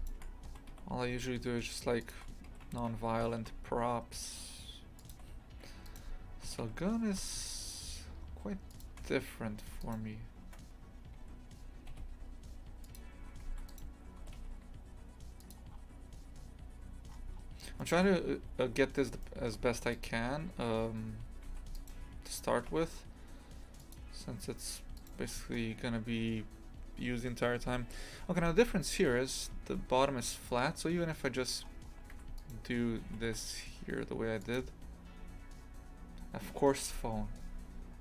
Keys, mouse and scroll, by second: 0.0 alt+shift+right click, 0.5 g, 2.5 g, 5.7 1, 5.9 right click, 6.5 g, 9.7 2, 9.8 right click, 11.2 g, 13.4 2, 13.5 1, 13.7 right click, 14.2 g, 15.7 scroll down 2, 17.1-17.8 scroll up 1, 17.8 shift+middle click, 18.6-19.3 scroll up 2, 19.3 middle click, 19.8 2, 20.0 right click, 21.5 1, 21.8 right click, 22.5 g, 25.0 right click, 25.3-28.9 scroll down 2, 31.3 scroll up 2, 32.1 2, 32.4 right click, 33.1 g.